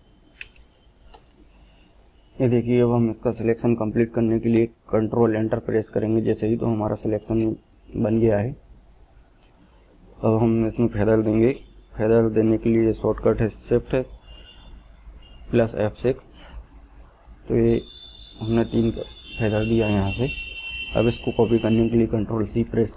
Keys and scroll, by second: 3.3 ctrl+Return, 13.8 shift+F6, 22.2 ctrl+c.